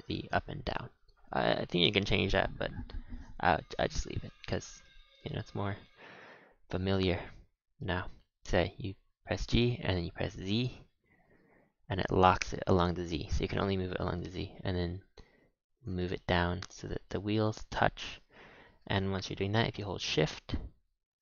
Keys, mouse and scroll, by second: 0.0-3.1 shift+middle drag, 4.4 scroll up 3, 4.8-5.3 shift+middle drag, 5.3-5.8 scroll up 1, 5.8 g, 8.2 g, 11.1 g, 16.0-16.6 shift+middle drag, 16.7 middle drag, 16.9 middle click, 17.2-17.5 middle drag, 17.7-21.2 middle drag.